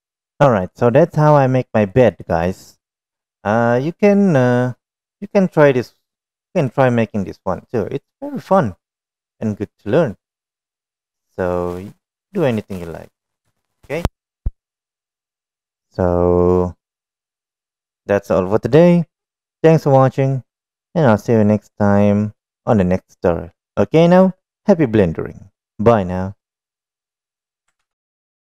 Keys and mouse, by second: 0.0 n, 5.1-7.3 middle drag, 7.9-8.5 middle drag, 8.9-9.2 middle drag, 10.0-10.7 middle drag, 11.2-12.3 middle drag, 13.9 shift+middle click, 14.4 middle click, 21.7-22.9 middle drag.